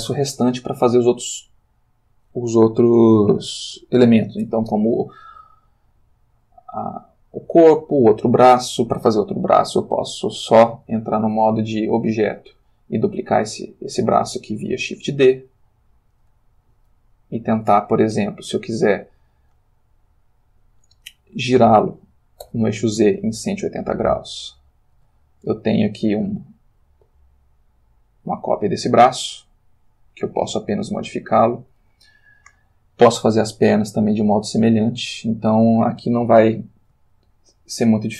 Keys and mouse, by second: 10.1 click, 11.7 click, 12.4 click, 12.8-14.5 middle drag, 13.3 g, 14.5 Escape, 15.1 shift+d, 16.1 click, 22.4 r, 22.9 z, 24.2 0, 25.0 Return, 27.1 s, 28.6 click, 30.9 x, 31.3 click, 37.1-38.1 shift+middle drag.